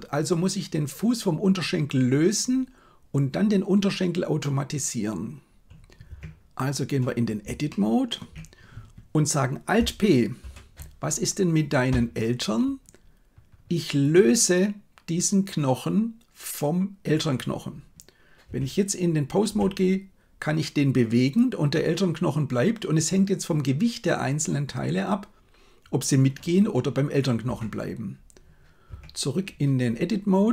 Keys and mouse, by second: 6.1 Tab, 7.6 shift+middle click, 10.4 alt+p, 18.5 Tab, 19.5 g, 28.9 Tab.